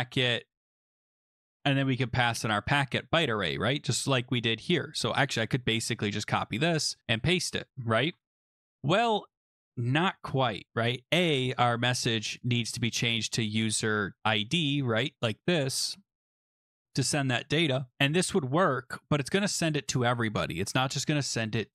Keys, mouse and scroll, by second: 2.8-3.8 scroll, 4.8 click, 5.6 ctrl+c, 5.9-6.4 scroll, 7.8 scroll, 7.9 click, 8.0 ctrl+v, 12.3 click, 12.4 click, 14.9 click, 15.1 shift+click, 15.4 shift+click, 15.7 ctrl+c, 16.3 click, 16.6 click, 16.7 click, 16.7 shift+click, 16.8 ctrl+v, 21.4 click.